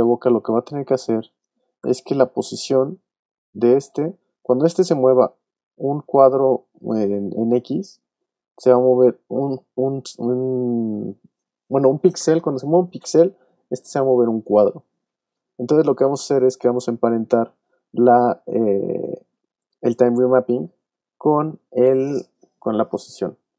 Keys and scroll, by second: 1.8 p.